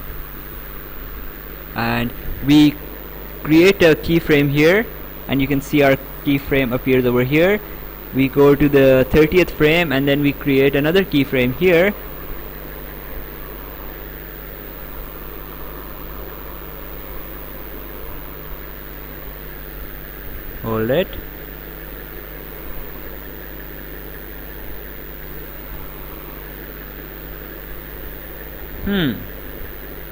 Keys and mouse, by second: 0.5 right click, 4.1 click, 7.4 click, 11.7 click, 15.8 click, 18.0 click, 20.8 Escape, 21.7 click, 23.9 Escape, 24.6 click, 26.8 Escape, 27.2 click, 28.7 click.